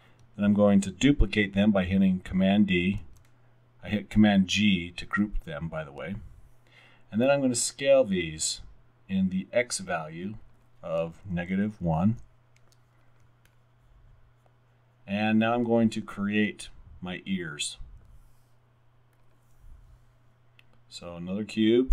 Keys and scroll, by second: 3.0 super+d, 11.5-11.9 typing, 12.1 Return, 13.3-14.1 typing.